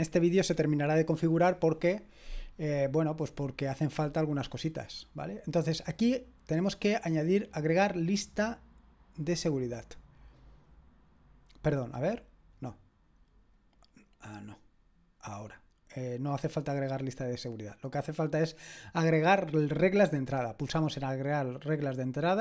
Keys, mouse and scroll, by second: 2.7-4.1 scroll down 1, 6.6-7.4 scroll down 2, 9.3 click, 12.4 click, 13.6 click, 15.4-16.2 scroll down 2, 16.2 scroll down 1, 20.1 click.